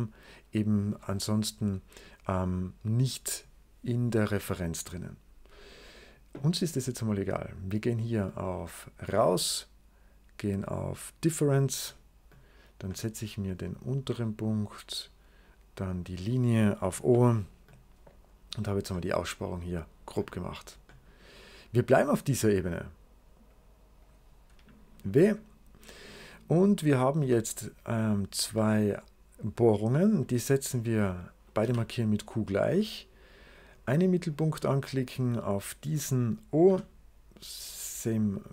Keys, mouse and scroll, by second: 7.4 click, 9.0-11.2 middle drag, 11.2 click, 12.2 click, 12.8-14.0 middle drag, 14.0 click, 15.9 click, 16.9 o, 18.9 middle click, 19.2 right click, 22.5 click, 23.4 click, 23.9 click, 24.1 shift+click, 26.0-26.8 scroll up 2, 26.2 right click, 27.1 c, 27.4 click, 28.0 click, 28.3 c, 28.5 click, 29.4 click, 30.0 click, 30.6 click, 31.5 q, 32.6-33.6 drag, 34.2 click, 35.3 click, 36.5 0, 37.5 click, 38.4 click.